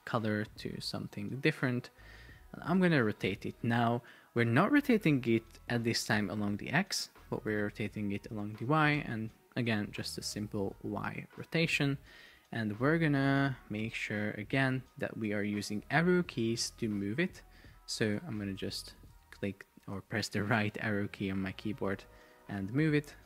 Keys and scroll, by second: 11.4 Return, 18.5 shift+Right, 22.2 shift+Left.